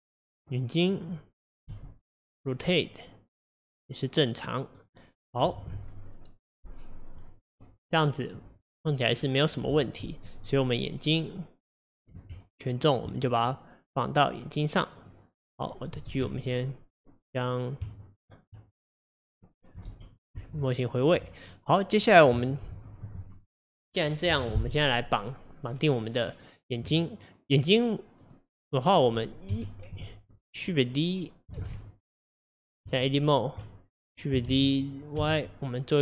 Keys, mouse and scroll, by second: 0.4-1.8 middle drag, 1.8 r, 11.0 click, 12.4 Tab, 13.4 click, 15.0 click, 18.5 Tab, 19.1 click, 19.9 alt+g, 20.4 alt+r, 20.9 click, 21.6-25.4 middle drag, 28.2 click, 29.5 KP_1, 30.0 KP_3, 31.6 shift+d, 32.9 Tab, 34.5 shift+d.